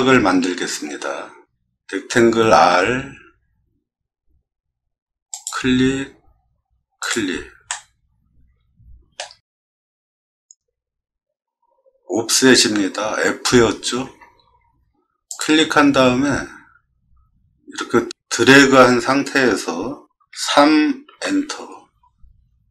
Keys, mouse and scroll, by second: 2.7 r, 5.3 click, 7.0 click, 7.7-9.2 middle drag, 14.0 f, 21.1 Return.